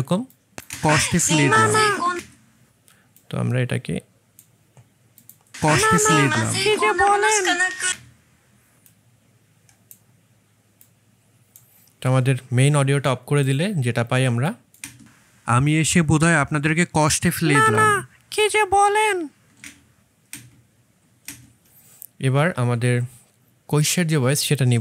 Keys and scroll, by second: 0.6 space, 5.4 space, 14.7 space, 19.6 space, 20.2 space, 21.1 space.